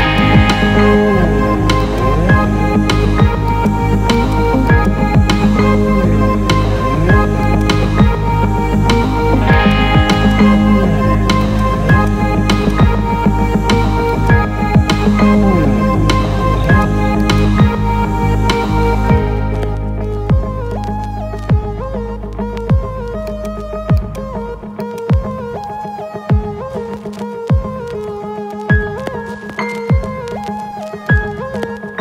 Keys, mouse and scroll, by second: 0.1 click, 0.7 z, 1.7 alt+middle click, 3.4 alt+middle click, 4.2-5.7 ctrl+alt+middle drag, 7.4 click, 9.6 middle click, 10.2-11.2 middle drag, 11.4 alt+shift+middle click, 12.6 middle click, 14.2 click, 16.6 alt+shift+middle click, 17.3 middle click, 18.6 ctrl+r, 22.3 Return, 23.2 alt+middle click, 24.0 alt+shift+middle click, 24.8 middle click, 25.5 ctrl+space, 26.8 ctrl+r, 30.0 Return, 30.9 ctrl+space.